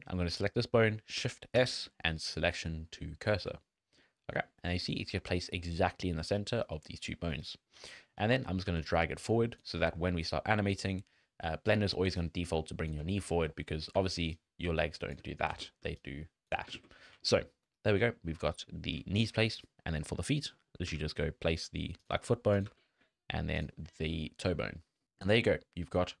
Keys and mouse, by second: 1.6 shift+s, 4.0 click, 5.8 click, 7.0 click, 8.2 g, 11.9 d, 12.2 click, 12.9 d, 13.0 d, 13.3 ctrl+z, 13.9 d, 14.3 click, 15.2 d, 15.5 ctrl+z, 15.8 d, 16.0 click, 16.5 d, 16.8 ctrl+z, 17.3 drag, 18.2 shift+middle click, 18.7 shift+middle drag, 19.7 middle click, 20.6 middle click, 20.9 g, 22.7 g, 24.0 click, 24.8 shift+click, 25.4 middle click, 26.0 middle click.